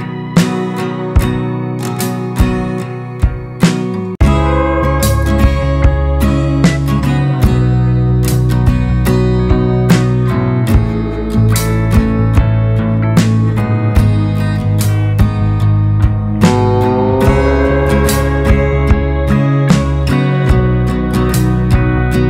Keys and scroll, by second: 0.0-0.2 typing, 1.4 Left, 1.5-1.8 typing, 2.1 Left, 3.3 ctrl+space, 6.1 ctrl+space, 6.8-9.6 typing, 10.0 Left, 10.1 Left, 10.2 Left, 10.3 Left, 10.4 Left, 10.5 Left, 10.8 BackSpace, 11.0 Return.